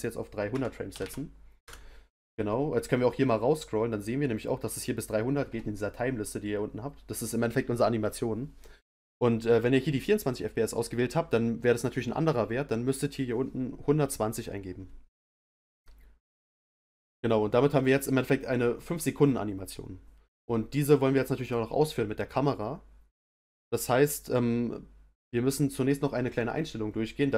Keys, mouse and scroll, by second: 1.0 0, 3.1-4.2 scroll down 6, 21.4 click.